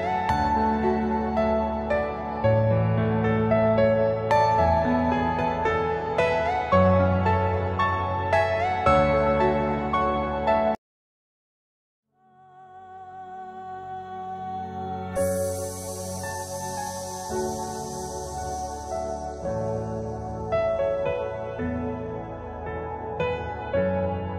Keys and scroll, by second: 3.2 ctrl+g, 3.8 c, 4.7 Escape, 5.4 alt+c, 10.1 F2, 12.3 Escape, 21.6 F4, 23.6 F2.